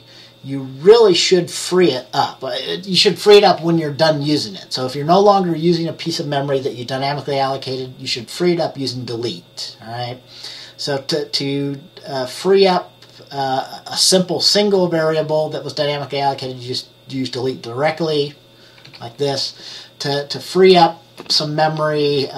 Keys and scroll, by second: 19.0 F10.